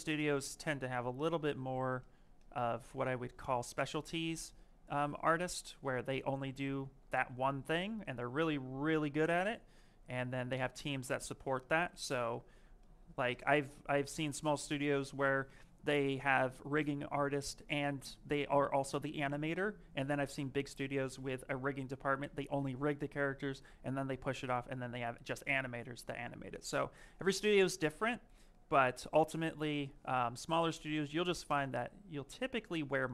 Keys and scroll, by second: 1.5 ctrl+z, 3.1 w, 6.8 ctrl+z, 10.4 q, 31.6 s.